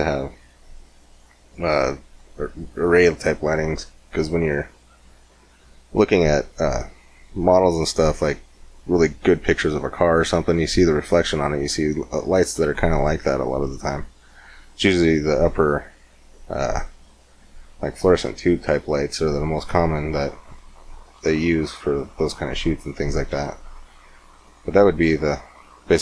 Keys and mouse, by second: 20.7-26.0 middle drag.